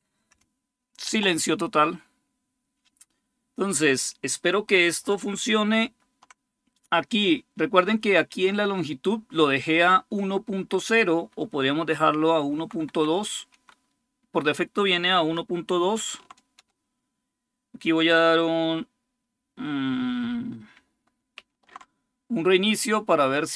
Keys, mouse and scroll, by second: 5.6 super+6, 10.4 Left, 11.5 Delete, 11.9 2, 12.3 Down, 12.7 Left, 13.2 2, 13.3 Delete, 15.7 ctrl+o, 16.4 Return, 21.2 ctrl+super+r.